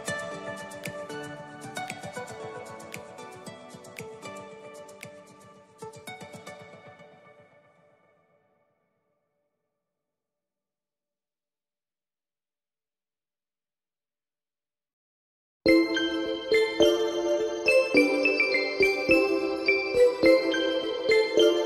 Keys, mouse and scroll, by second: 1.1 Tab, 3.4-4.8 drag, 4.8-6.7 middle drag, 8.9-9.5 drag, 9.5 middle click, 10.0-11.4 scroll up 1, 11.4-14.1 drag, 15.2-16.3 drag, 16.3-18.6 scroll down 13, 18.6-21.6 drag.